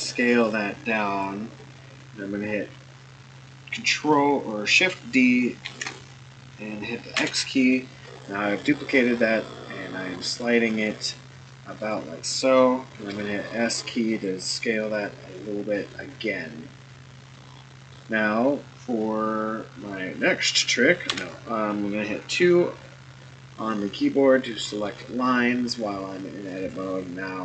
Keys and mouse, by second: 5.6 shift+d, 12.9 s, 17.3-17.9 middle drag, 21.1 2, 24.5 shift+middle click, 26.7 click.